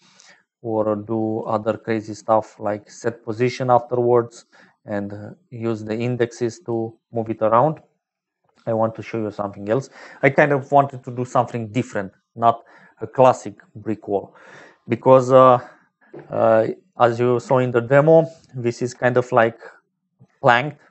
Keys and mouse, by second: 0.6 click, 2.3 middle click, 5.8 click, 17.8 middle click, 18.7 shift+click.